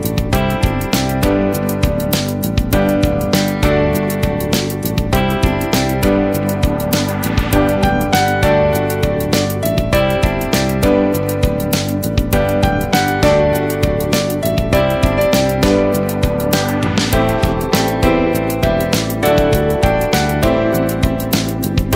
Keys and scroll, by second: 1.0 ctrl+space, 2.2 ctrl+space, 13.3 ctrl+shift+o, 14.2 ctrl+c, 15.8 space, 20.7 ctrl+v.